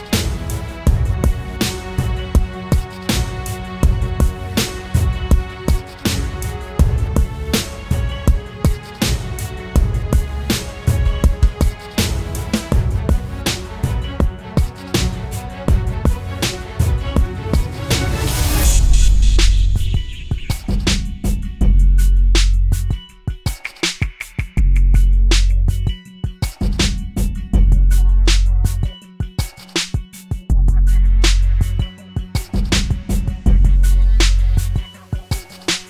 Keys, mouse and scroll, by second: 23.4 ctrl+t, 24.3 alt+shift+click, 29.9 alt+shift+click.